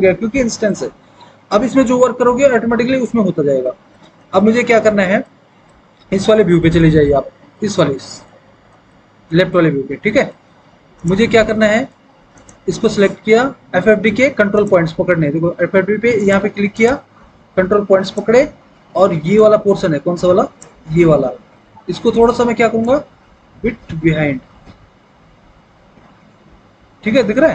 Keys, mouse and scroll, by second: 6.0 alt+w, 7.2 alt+w.